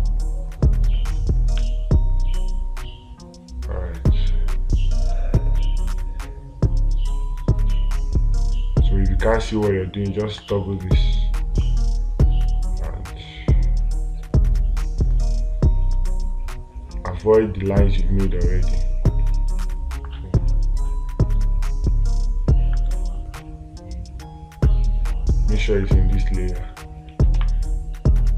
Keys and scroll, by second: 27.8 space.